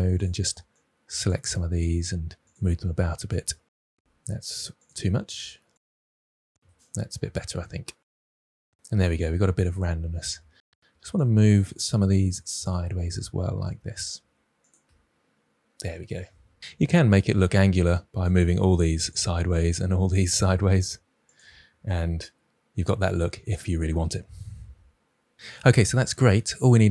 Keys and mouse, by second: 0.1 click, 1.8 g, 2.4-3.1 drag, 3.1 g, 3.3 drag, 3.6 Tab, 4.4 Tab, 4.8 g, 5.2 click, 5.3 g, 5.4 click, 5.5 Tab, 6.4 Tab, 6.8 click, 6.9 g, 7.2 click, 7.4 click, 7.5 g, 7.9-8.7 drag, 8.7 g, 9.2 click, 9.3 Tab, 10.6 Tab, 11.9 g, 12.5 click, 13.6 click, 14.1 g, 14.6 click, 14.8 Tab, 16.7 Tab, 17.7 drag, 18.4 g, 19.0-19.7 drag, 20.4 g, 21.2 click, 21.4 Tab.